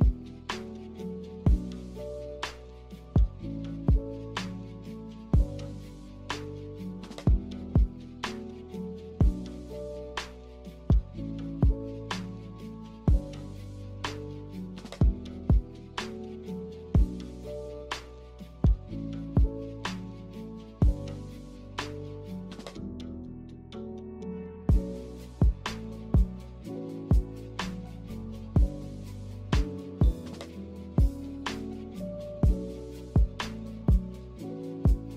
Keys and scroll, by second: 12.6 a, 17.0 g, 20.1 z, 22.2 g, 24.7 Escape, 26.9 z.